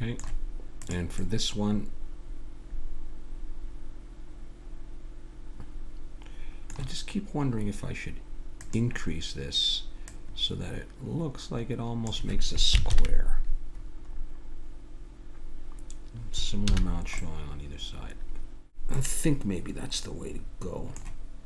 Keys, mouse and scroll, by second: 0.8-2.1 drag, 2.1 middle click, 5.7 middle click, 8.6-12.0 drag, 12.9 ctrl+KP_3, 14.1-16.1 middle drag, 16.7 a, 16.9-18.6 middle drag, 19.0-20.8 middle drag.